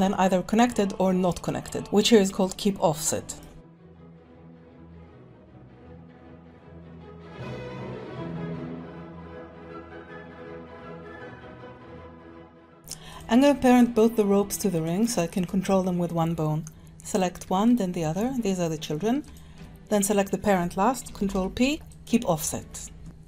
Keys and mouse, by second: 3.5-12.5 typing, 4.3 click, 5.0 shift+click, 5.9 right click, 6.3 shift+click, 7.9 middle click, 8.2 shift+click, 8.4 click, 8.7 click, 9.4 click, 9.6 middle click, 10.2 click, 10.5 ctrl+z, 10.5 ctrl+z, 10.6 click, 11.0 click, 11.1 click, 11.8 click, 12.4 click, 12.7 click, 13.1 click, 13.8 shift+click, 17.1 click, 17.7 shift+click, 19.3 shift+click, 21.2 ctrl+p, 23.0 Tab, 23.0 click.